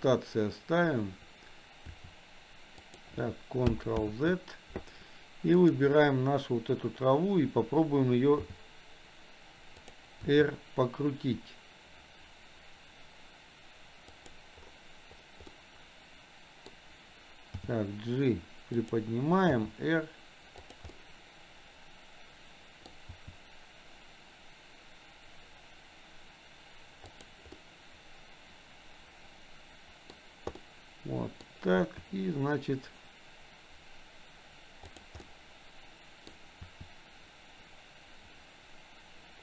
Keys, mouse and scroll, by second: 2.0 r, 4.1 ctrl+z, 5.6 click, 8.4 g, 10.4 r, 15.6-16.9 middle drag, 17.6 g, 19.6 r, 21.1-23.0 middle drag, 23.2 r, 27.7 middle click, 28.7-30.2 middle drag, 30.7 middle click, 31.9 r, 35.4-36.5 middle drag, 36.7 r.